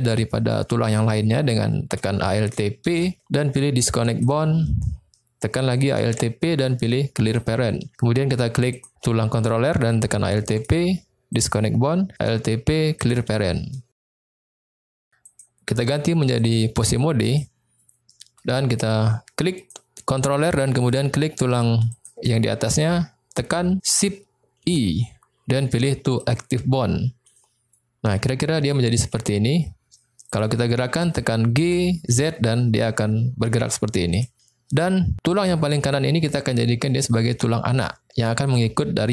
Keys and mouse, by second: 2.9 alt+p, 6.0 alt+p, 8.8 click, 10.4 alt+p, 12.1 alt+p, 15.3-17.4 drag, 18.1 middle click, 19.6 click, 21.9 shift+click, 24.6 shift+i, 27.4 middle click, 29.2 middle click, 30.3 click, 31.0 click, 31.6 g, 32.1 z, 34.1 click, 35.4 click.